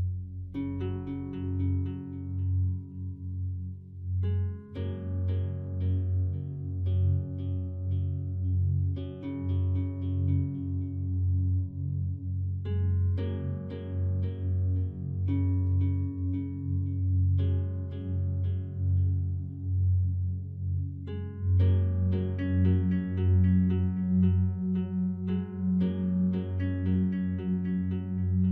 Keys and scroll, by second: 4.6 ctrl+d, 28.3 ctrl+t.